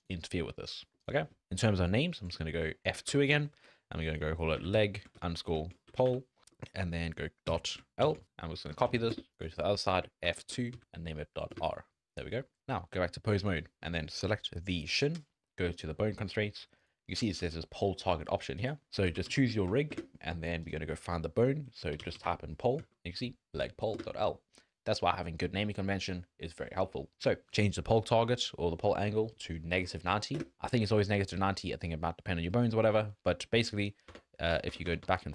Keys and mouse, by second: 0.2 click, 0.9 click, 3.1 F2, 5.8 BackSpace, 10.2 F2, 12.3 click, 12.6 ctrl+Tab, 15.7 click, 16.8 click, 18.7-19.9 drag, 20.7-24.0 drag, 27.4-30.4 drag, 31.4 middle click, 33.3 click, 34.1 Tab, 34.5 Tab, 34.7 Tab, 34.8 Tab, 35.0 Tab, 35.2 Tab.